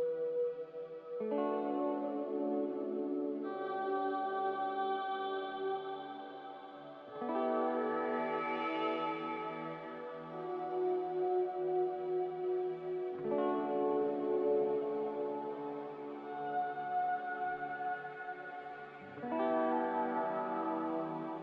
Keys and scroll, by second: 3.5 Delete, 6.4 z, 20.4 a.